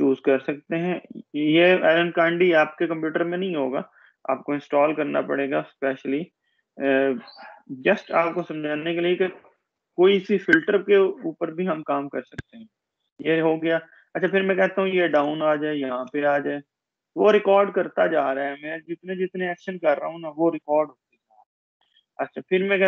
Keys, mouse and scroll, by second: 3.3 click, 15.4-16.9 drag, 17.7-18.9 scroll down 1.